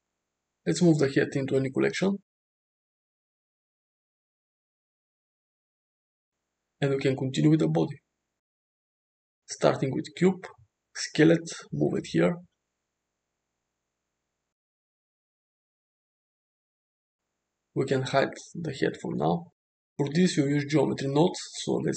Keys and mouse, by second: 0.0-0.3 drag, 0.9 m, 6.3 `, 8.5 shift+middle drag, 8.8 shift+a, 10.6 s, 11.5 g, 14.5 s, 16.1 shift+middle drag, 19.1 click, 19.9 shift+a.